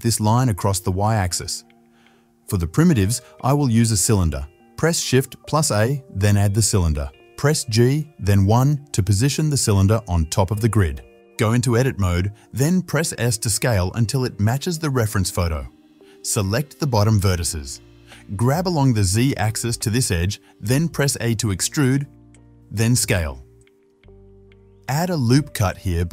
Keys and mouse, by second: 5.5 shift+a, 9.4 g, 11.8 Tab, 13.1 shift+z, 14.1-17.8 shift+drag, 14.1 s, 17.5 s, 21.9 e, 22.5-24.3 drag, 23.0 s, 24.5 ctrl+r.